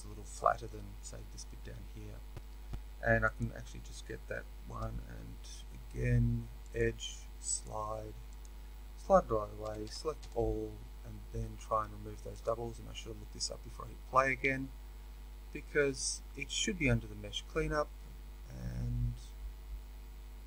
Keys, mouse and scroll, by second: 3.4 alt+click, 7.6-9.6 drag, 9.6 a.